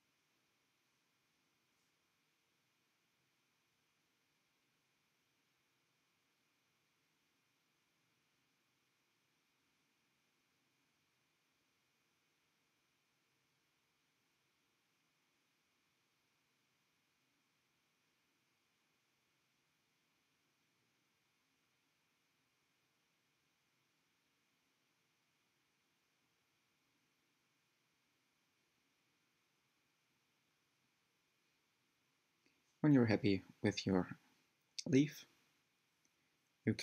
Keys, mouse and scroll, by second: 0.1 ctrl+click, 0.5 middle click, 1.0 click, 2.4 shift+click, 3.0 shift+click, 3.3-4.5 middle drag, 4.5 shift+click, 5.0 s, 6.6-7.7 middle drag, 7.7 s, 9.2 click, 9.7 g, 11.6 click, 11.8 g, 12.6-13.1 scroll down 4, 13.1 Tab, 13.3-14.2 middle drag, 14.2 alt+z, 14.5 scroll down 2, 14.6-16.3 middle drag, 16.3-16.6 scroll up 3, 16.7 Tab, 16.9 scroll up 1, 17.4 click, 17.8 shift+click, 18.0 g, 20.0-21.6 middle drag, 22.4 shift+click, 22.8 shift+click, 23.2 scroll down 1, 24.1 shift+click, 24.8 s, 26.7 click, 26.8 g, 28.6 click, 29.1 shift+middle click, 29.4 scroll up 4, 30.1 g, 31.8 shift+click, 32.2 shift+click, 33.2 shift+click, 33.6 g, 34.7 Tab, 35.0-35.3 middle drag, 35.3-36.0 scroll down 7, 35.6 middle drag, 36.0 click, 36.5-36.8 middle drag.